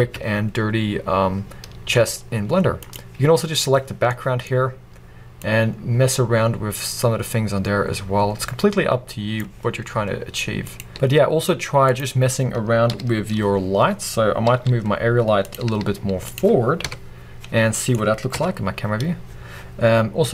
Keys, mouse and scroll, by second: 5.5-12.0 drag, 10.9 alt+a, 14.0 scroll down 1, 14.6 g, 15.6 click, 15.7 r, 16.4 click, 16.7-20.3 middle drag, 18.4 KP_0, 19.1-20.2 scroll up 2, 20.2 scroll up 1.